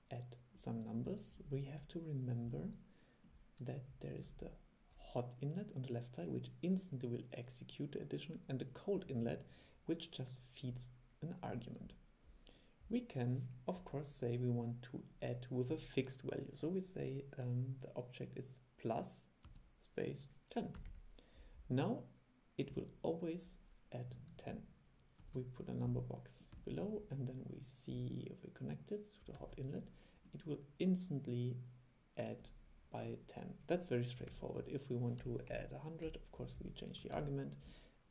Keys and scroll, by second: 25.3 super+3, 29.5 super+e, 34.4 super+e, 37.3 super+e.